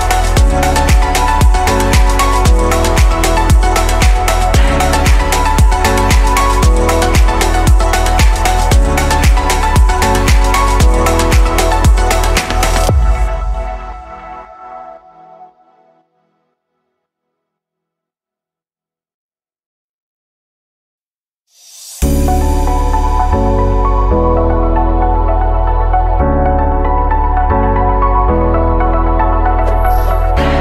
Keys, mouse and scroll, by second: 2.6 click, 3.3-4.2 scroll down 5, 4.9 r, 8.4-9.5 middle drag, 9.5-10.6 scroll up 2, 10.6 click, 11.1-12.5 shift+middle drag, 12.5 click, 18.6 click, 18.9-19.3 scroll down 2, 19.3-22.3 middle drag, 22.3-22.9 scroll down 1, 22.9 scroll up 3, 23.6 click, 24.2-25.4 middle drag, 25.4 click, 26.8 click, 27.1-28.8 middle drag, 28.8 click, 29.5 click, 30.0-30.6 scroll up 3.